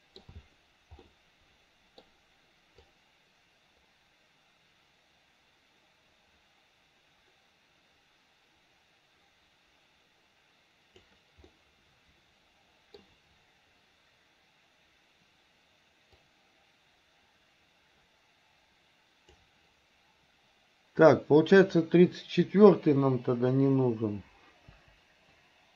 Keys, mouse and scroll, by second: 1.1-2.0 middle drag, 2.9-11.1 drag, 11.5-13.0 middle drag, 16.3-19.5 drag, 21.0-21.6 drag, 24.8 Delete.